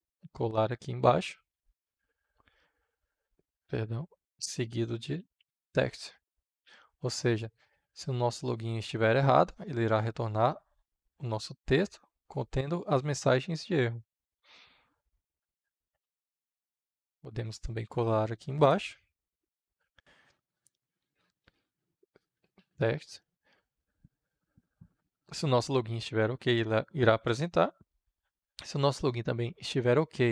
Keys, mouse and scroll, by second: 1.1 ctrl+v, 2.6 shift+8, 3.6 Return, 4.1-5.9 typing, 7.3-16.1 drag, 17.5 click, 18.3 Return, 19.6 ctrl+v, 21.4-23.0 typing, 23.1 Return, 24.2-30.3 drag.